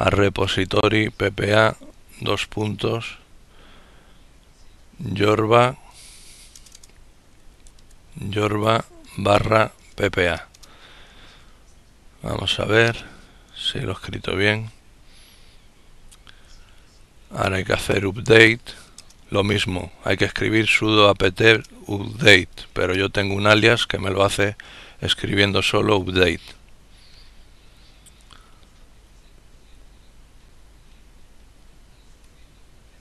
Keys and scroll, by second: 0.0-1.3 typing, 4.0-7.9 typing.